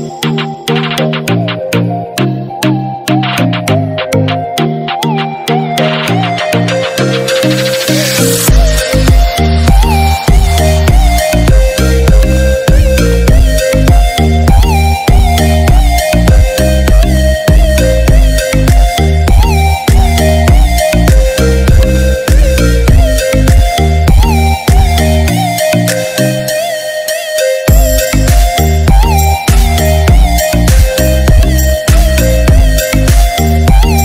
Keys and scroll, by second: 3.7 ctrl+=, 24.1 ctrl+d, 27.4 ctrl+-, 31.1 ctrl+-.